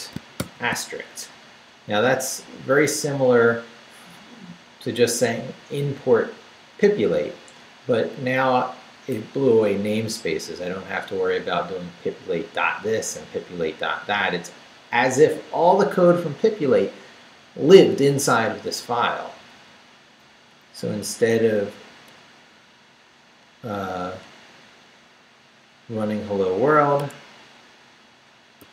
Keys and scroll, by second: 0.0-0.4 typing, 19.2 Down, 20.8 Left, 22.5 Left, 27.0 Escape, 28.6 shift+d.